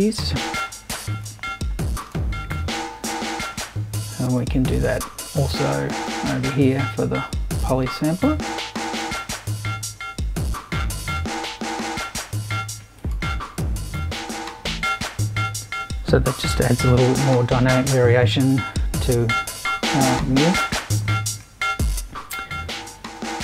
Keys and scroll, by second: 2.8 super+c, 3.7 super+v.